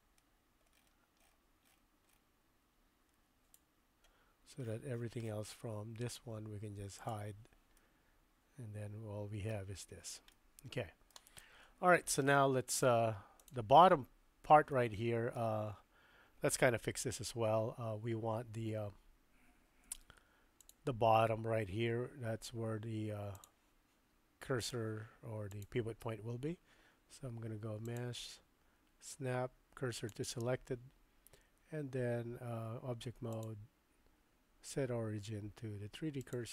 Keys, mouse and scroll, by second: 7.0 click, 7.7-9.5 middle drag, 10.3-11.1 middle drag, 11.4-12.0 middle drag, 12.2-12.9 middle drag, 13.4 click, 14.8-15.4 middle drag, 20.0 Tab, 24.6 click, 28.0-30.1 drag, 32.5 Tab, 33.5-36.3 drag.